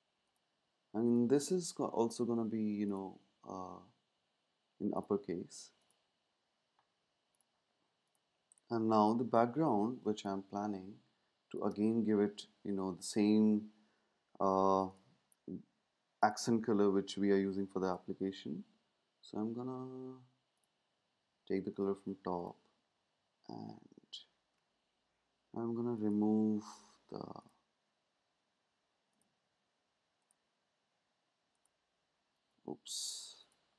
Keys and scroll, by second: 10.1 space.